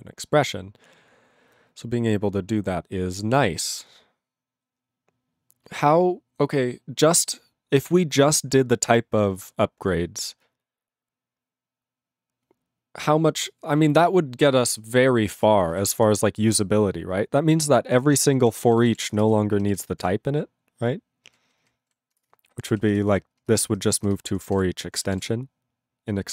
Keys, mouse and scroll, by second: 15.9 ctrl+s, 17.3-17.9 scroll down 7, 18.0-19.5 typing, 19.6 ctrl+r, 20.0 ctrl+r, 20.8 ctrl+r, 21.3 ctrl+r, 21.6 ctrl+r, 21.9 ctrl+s, 22.3 Return, 22.8 ctrl+s, 22.9 ctrl+f, 23.1 ctrl+f, 23.4 ctrl+space, 23.8 ctrl+alt+f, 24.1 ctrl+alt+f, 24.3 ctrl+alt+b, 24.5 ctrl+w, 25.3 ctrl+s.